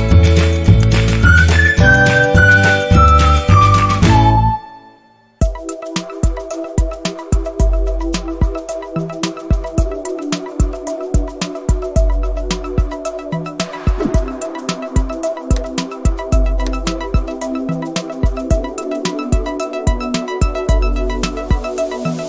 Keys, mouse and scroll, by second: 1.4 click, 1.4 space, 1.5-2.1 scroll up 2, 1.8 click, 2.1 click, 4.8 click, 5.9 space, 6.0 click, 8.0 click, 8.2 space, 11.9 scroll up 1, 12.2 scroll down 1, 13.0 space, 13.2-13.7 scroll up 2, 14.5 click, 17.0 space, 17.1 click, 17.4 space, 18.2 click, 21.2 scroll down 1, 22.0 scroll down 1, 22.1 click.